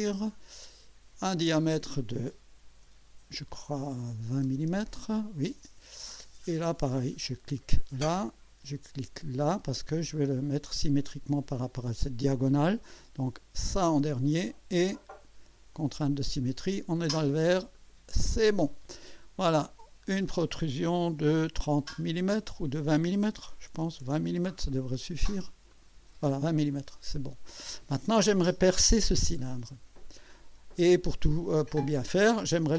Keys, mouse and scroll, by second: 0.0 click, 1.4 click, 4.1-4.9 typing, 7.3 click, 9.6 click, 14.2 click, 15.7 click, 17.7 click, 20.1 click, 23.4 BackSpace, 23.8 KP_2, 24.0 KP_0, 25.7 click, 26.6-27.9 drag, 29.5-30.7 drag, 31.6-32.3 drag.